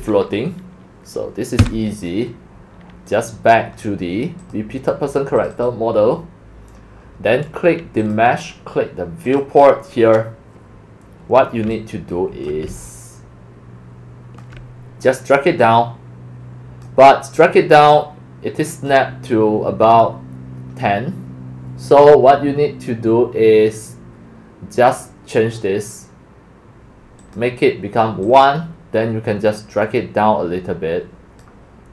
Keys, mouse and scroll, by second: 0.0-0.8 typing, 1.6 Escape, 3.8-4.4 drag, 4.4 click, 5.4 click, 5.5 click, 8.0 click, 9.3 click, 9.7 drag, 10.0 middle click, 10.3 middle click, 10.5 scroll, 12.5-14.3 alt+drag, 14.4 alt+middle click, 14.5 alt+middle click, 15.6-19.0 drag, 21.8-24.1 drag, 27.2 click, 28.2 click, 29.6-31.4 drag, 31.6 click.